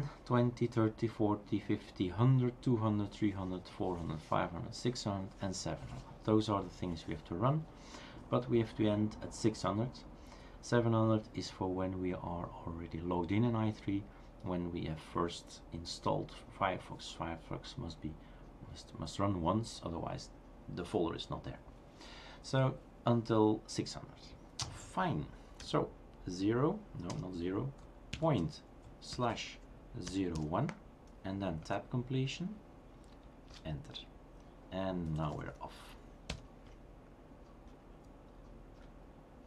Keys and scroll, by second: 25.4-27.1 typing, 30.3 typing, 31.6 Tab, 33.5 Return, 34.9-36.0 typing, 36.3 Return.